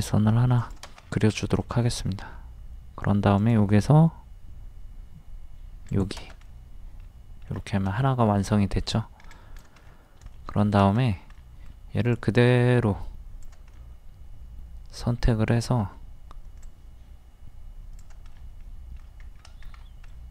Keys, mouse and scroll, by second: 1.0-1.3 scroll down 1, 1.6 middle click, 3.4 click, 6.5 middle click, 7.6 scroll down 1, 8.4 middle click, 8.8 scroll up 1, 9.4 click, 9.8 scroll down 1, 10.3 shift+middle click, 12.1-13.7 drag, 13.7-16.3 middle drag, 16.6 click, 18.4 middle click, 19.2-19.6 scroll up 1, 20.1 middle click.